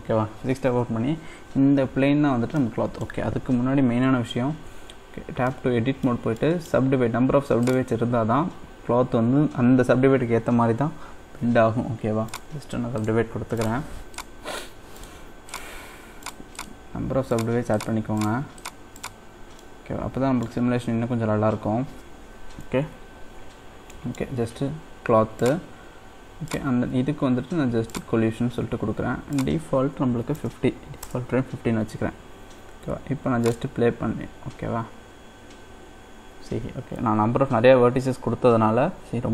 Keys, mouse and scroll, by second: 2.6-4.7 middle drag, 5.5 middle click, 6.1 scroll up 1, 6.3 middle click, 7.6-10.8 right drag, 13.0-19.6 right drag, 19.6 middle click, 20.6-22.0 scroll up 2, 22.0-22.6 scroll up 1, 22.6 Tab, 23.3-24.0 scroll up 1, 24.0-25.4 middle drag, 25.4-26.5 drag, 27.9-32.4 drag, 33.4-35.0 drag, 35.0-37.8 scroll down 1.